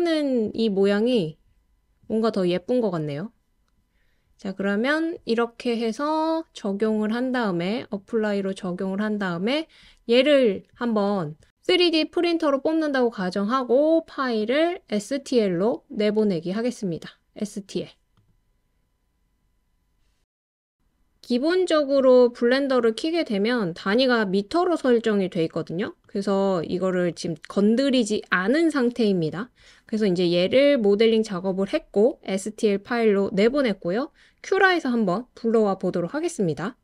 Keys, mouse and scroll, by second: 6.9-8.1 drag, 14.5-18.8 drag, 26.0 click, 27.1-29.3 drag.